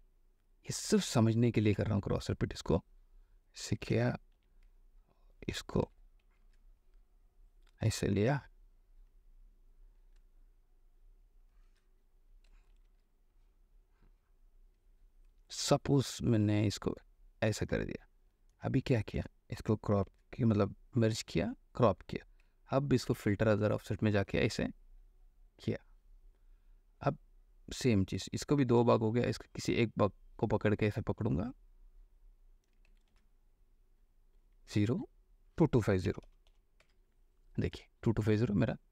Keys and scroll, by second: 1.7 ctrl+t, 4.1 Return, 4.5 v, 6.4 t, 8.4 Return, 12.9 ctrl+t, 15.5 Return, 19.8 ctrl+shift+e, 20.2 a, 21.3 ctrl+p, 23.3 ctrl+h, 29.1 m, 33.3 ctrl+h, 35.0 0, 36.3 KP_2, 36.4 KP_2, 36.6 KP_5, 37.0 KP_0.